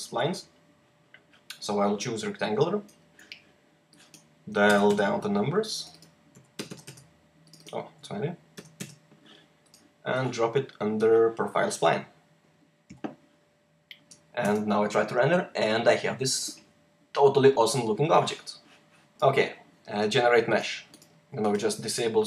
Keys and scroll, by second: 4.4 typing, 4.8 Tab, 6.2-6.6 typing, 7.8-8.4 typing, 12.7 h, 14.3 r.